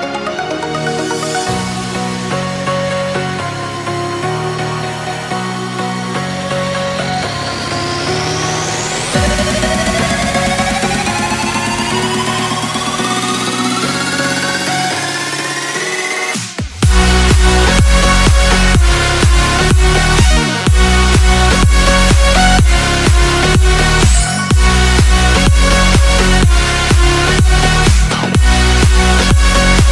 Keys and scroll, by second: 0.0-2.1 typing, 3.3 z, 5.6 space, 8.3 space, 8.8 space, 9.2 x, 10.5 space, 10.8 x, 12.6 space, 12.8 z, 14.1 space, 16.9 space, 17.9 space, 19.1 space, 19.6 x, 21.7 x, 23.8 space, 24.2 x, 27.7 ctrl+z, 28.3 space, 28.6 x, 29.7 space.